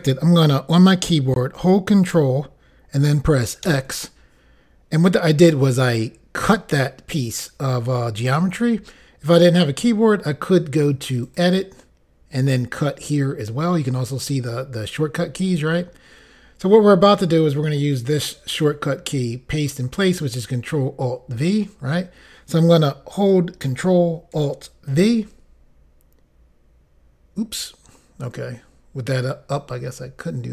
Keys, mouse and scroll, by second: 3.6 ctrl+x, 11.2 click, 24.9 ctrl+alt+v.